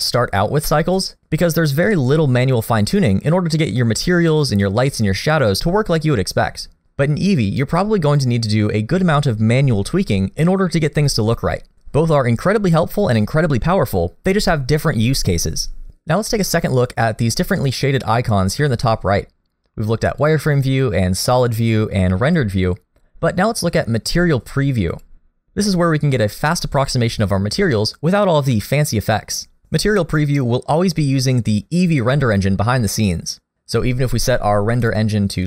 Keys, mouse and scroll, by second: 3.6 middle click, 7.6 click, 20.2 click, 21.3 click, 22.3 click, 25.0 click, 34.8 click.